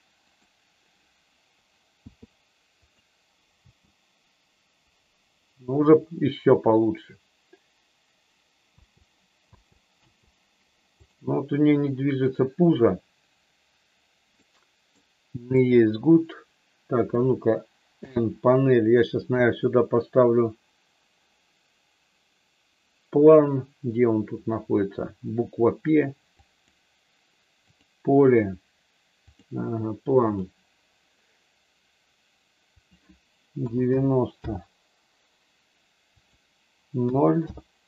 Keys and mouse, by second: 0.3 click, 1.9 i, 3.5 space, 8.7 space, 14.4 middle click, 15.5 click, 17.9 n, 19.4-26.8 drag, 27.8-29.4 drag, 30.3 click, 32.8-35.4 drag, 36.1-37.8 drag.